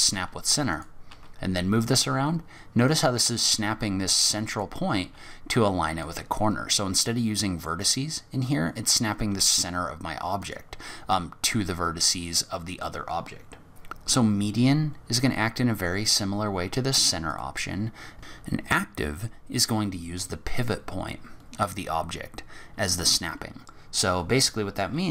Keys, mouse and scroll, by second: 1.1 g, 3.4 g, 5.0 g, 9.1 g, 13.9 click, 13.9-15.1 scroll down 4, 17.5 click, 18.2 Tab, 24.8-25.1 scroll up 2.